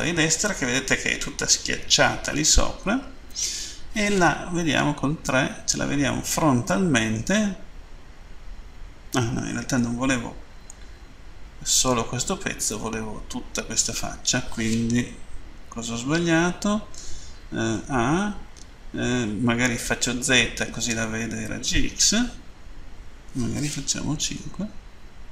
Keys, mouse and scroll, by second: 5.0 Page_Down, 10.7 middle click, 15.3 Page_Down, 16.0 End, 17.7 a.